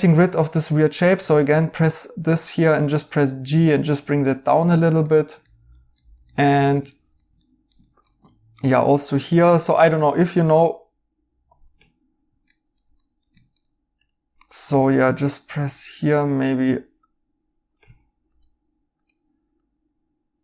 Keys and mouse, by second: 1.2 right click, 2.1 g, 5.0 right click, 9.2 g, 12.2 Escape, 12.4 right click, 14.7 r, 17.8 Escape.